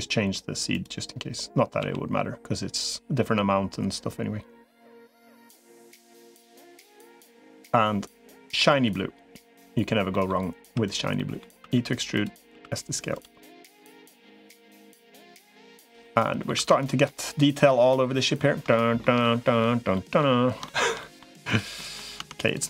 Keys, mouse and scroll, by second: 0.6 click, 1.6 g, 9.9 middle click, 10.4 3, 10.6 click, 11.0 middle click, 11.4 e, 12.4 s, 13.8-15.2 drag, 15.8 middle click, 16.4 Tab, 16.9-18.2 middle drag, 18.5 shift+middle click, 19.0 middle click, 19.7 middle click, 20.4 shift+middle click, 20.8 middle click, 21.6 middle click, 22.0 Tab.